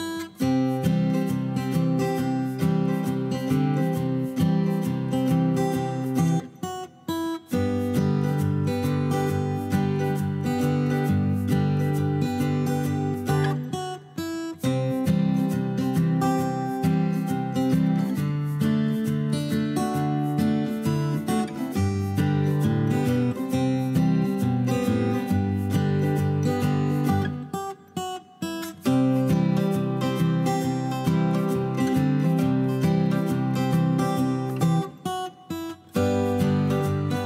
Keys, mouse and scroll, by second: 12.3-12.9 typing, 34.0 F2, 34.9 o.